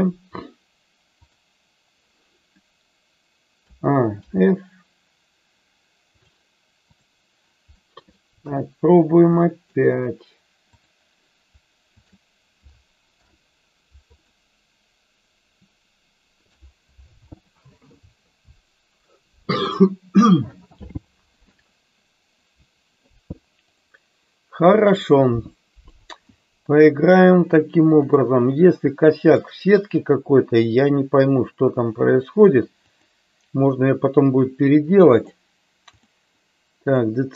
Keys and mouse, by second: 1.3-2.0 drag, 3.5 a, 4.3 f, 6.1 click, 7.8 middle click, 8.4 KP_3, 9.4 middle drag, 12.0 shift+click, 13.0 ctrl+p, 23.6 click, 28.1 click, 29.4-33.2 drag, 35.1 click, 35.9-37.1 drag.